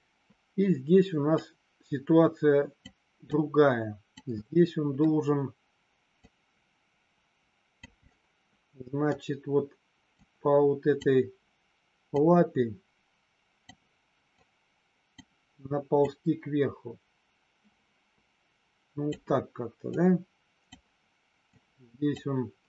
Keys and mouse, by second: 1.3-2.8 drag, 3.3 click, 4.4 middle click, 6.3-7.8 drag, 7.9-9.1 middle drag, 10.2 click, 12.2-13.7 drag, 14.4 click, 16.1-19.1 drag, 19.9 click, 21.4 click.